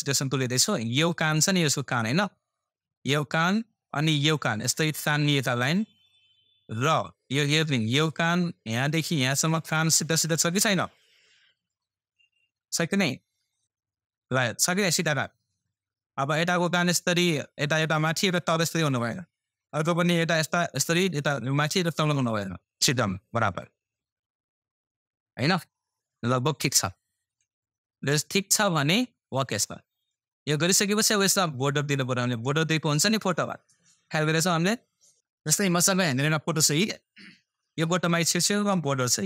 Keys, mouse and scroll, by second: 29.8-31.6 scroll down 1.